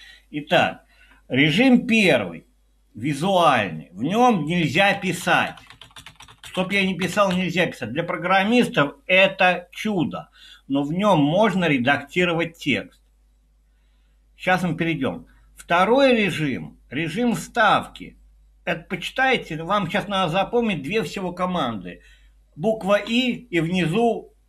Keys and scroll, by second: 4.4-7.8 typing, 23.1 i.